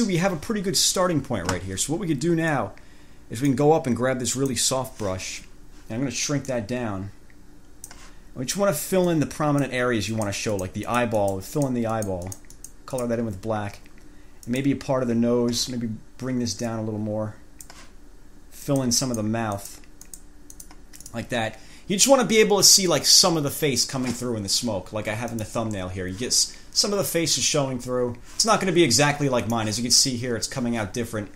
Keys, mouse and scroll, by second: 2.8 click, 4.6 click, 6.8-8.3 drag, 9.3 click, 10.4 click, 14.7 click, 16.9 click, 18.9 click, 19.8 click, 20.2 click, 20.7 click, 21.2 click, 25.4 click, 29.6 click.